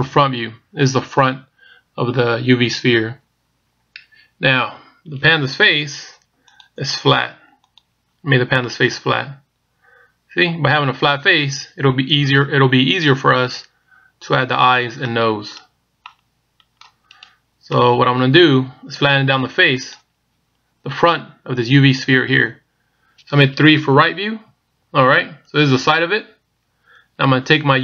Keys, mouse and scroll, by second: 0.1 KP_1, 8.7 middle click, 12.6-13.7 scroll up 1, 13.7 scroll down 1, 13.8-14.7 scroll down 1, 15.3 right click, 15.3 middle click, 16.3 middle click, 17.3 right click, 17.8 middle click, 20.0 middle click, 20.0 right click, 24.3 KP_3.